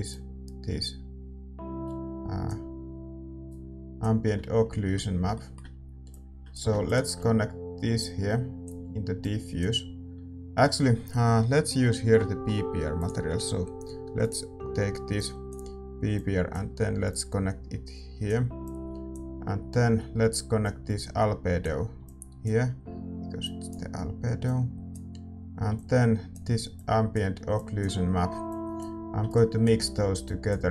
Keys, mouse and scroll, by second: 6.8-30.7 drag, 6.8-14.5 middle drag, 29.6-30.7 right drag.